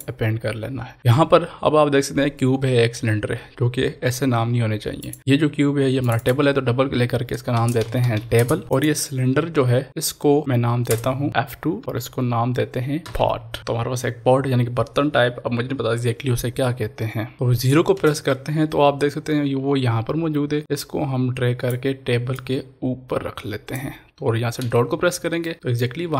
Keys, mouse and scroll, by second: 5.0 click, 5.0 click, 7.6 shift+t, 7.9 b, 8.5 Return, 8.8 click, 10.8 Return, 11.8 F2, 13.0 shift+p, 13.1 t, 13.6 Return, 20.6-25.4 drag, 25.4 middle click.